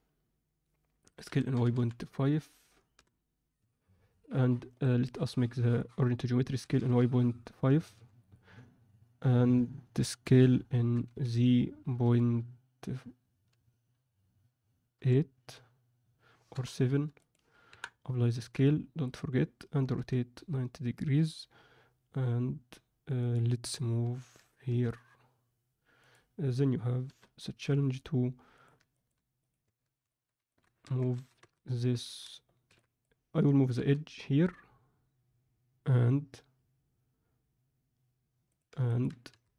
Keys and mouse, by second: 1.2 s, 4.6-5.7 right drag, 6.4 s, 10.8 s, 17.6 KP_1, 18.3 ctrl+a, 19.9 r, 24.0 g, 28.9 ctrl+middle click, 29.6 Tab, 30.0 alt+shift+middle click, 30.4 ctrl+alt+middle click, 30.8 1, 31.1 z, 31.4 a, 32.0 alt+a, 32.6 b, 33.7 g, 38.8 ctrl+alt+click, 39.2 a.